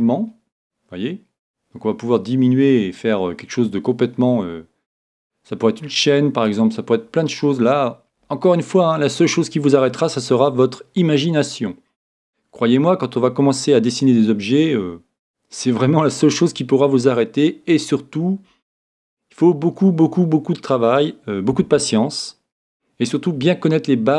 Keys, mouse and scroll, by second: 7.1-8.6 scroll down 1, 8.6-24.1 scroll down 1.